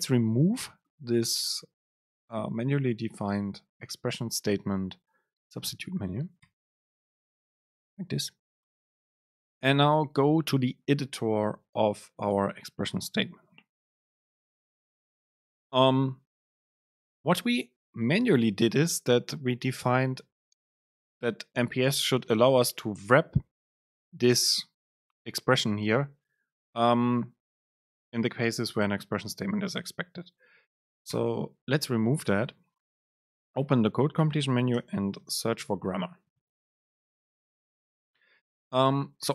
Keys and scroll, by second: 6.7 Delete, 22.0 shift+Right, 31.3 BackSpace, 33.5 BackSpace, 33.6 super+space.